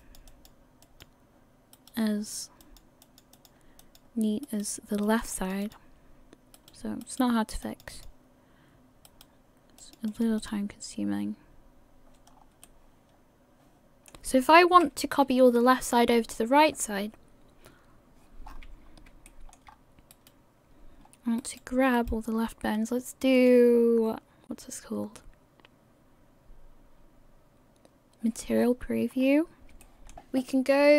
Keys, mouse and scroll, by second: 0.0 click, 0.3 click, 1.2 click, 2.1 right click, 2.6 click, 3.0 click, 3.8 click, 4.7 right click, 5.1 click, 5.3 click, 6.8 right click, 7.3 right click, 7.6 click, 7.9 click, 9.3 right click, 9.8 click, 10.1 click, 11.0 click, 12.3-12.8 scroll down 4, 12.7 middle click, 14.7 KP_1, 18.5 scroll up 6, 19.1 scroll up 1, 19.3 shift+middle click, 19.7 scroll up 1, 20.4 right click, 21.0-21.6 scroll up 1, 21.6 right click, 21.6-22.2 scroll up 1, 22.8 right click, 23.4 click, 28.5 scroll down 2, 29.1 scroll down 5, 29.8 shift+middle click, 30.7 scroll down 5.